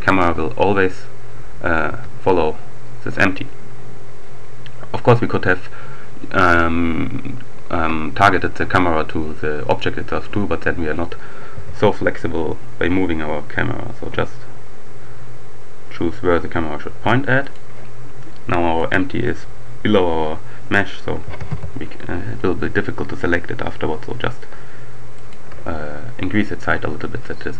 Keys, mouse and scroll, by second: 0.1 click, 1.7 click, 1.9 g, 4.9 click, 11.1 g, 17.3 click, 18.8-21.3 drag, 21.3 g, 21.5 z, 24.9 shift+click.